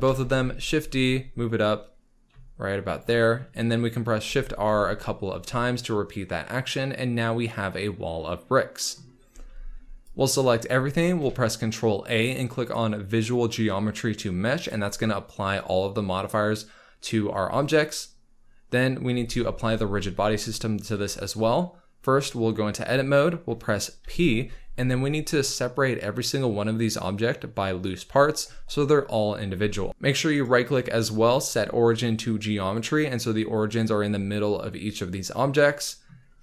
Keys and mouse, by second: 0.0 shift+d, 0.3 z, 4.2 shift+r, 4.6 shift+r, 9.3 z, 10.0 click, 11.2 ctrl+a, 19.1 z, 20.9 Tab, 24.0 p, 29.9 Tab, 29.9 q, 30.3-32.7 right drag.